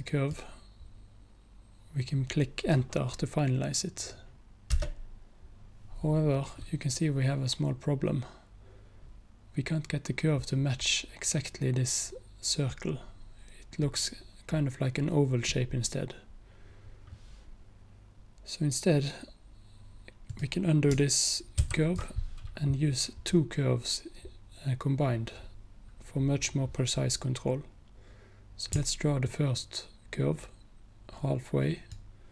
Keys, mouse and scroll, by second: 4.8 Return, 20.3 click, 21.7 ctrl+z, 29.3-32.0 alt+drag.